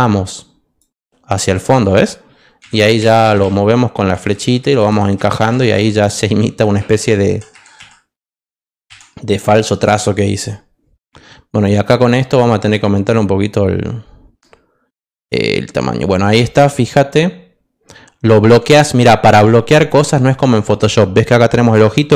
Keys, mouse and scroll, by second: 11.9 click.